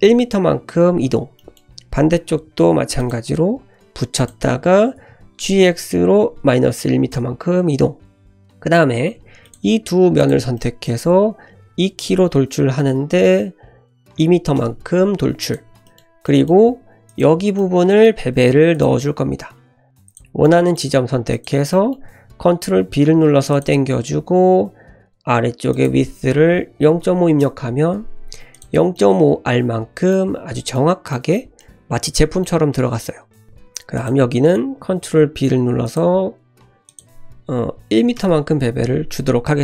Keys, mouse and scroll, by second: 1.4 shift+middle click, 2.3 ctrl+r, 5.0 g, 8.3 click, 9.1 3, 9.4 click, 10.2 shift+click, 10.5 middle click, 11.7 e, 15.4 click, 15.8 shift+middle click, 17.6 click, 18.1 click, 18.8 shift+click, 19.2 middle drag, 20.0 shift+click, 20.4 middle click, 21.3 shift+click, 21.7 middle click, 22.8 ctrl+b, 25.7-28.0 drag, 28.5 click, 28.9-30.2 middle drag, 30.5 Tab, 30.7-31.1 middle drag, 31.4 scroll down 1, 31.6-32.4 middle drag, 32.5 Tab, 33.0 middle click, 33.4 click, 33.9 click, 34.8 ctrl+b, 36.9-39.0 drag, 37.8 c.